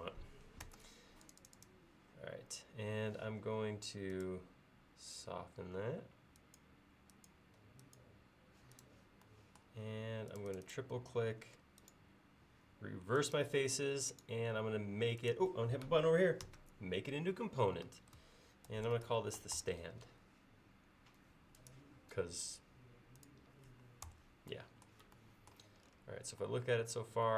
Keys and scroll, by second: 0.7 space, 16.5 g, 18.5-20.1 typing, 24.1 BackSpace.